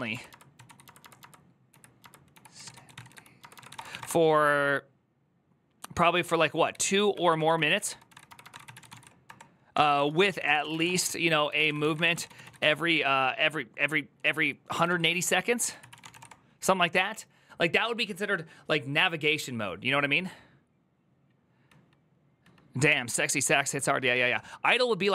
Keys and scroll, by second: 0.0-4.2 typing, 6.2-12.9 typing, 14.3-16.5 typing.